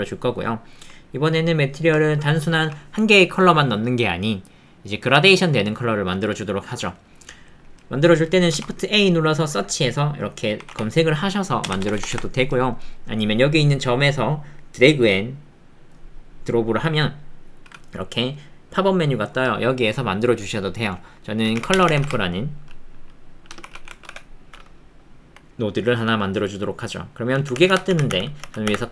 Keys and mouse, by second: 0.4 click, 1.0 ctrl+click, 1.6 click, 1.9 click, 8.1 click, 11.8 BackSpace, 14.2-28.9 drag.